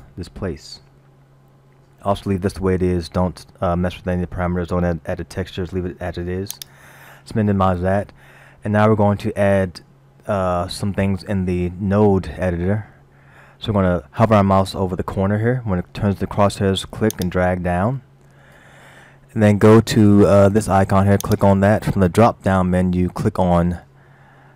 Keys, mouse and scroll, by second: 6.6 click, 8.4 scroll down 1, 17.1 click, 21.3 click.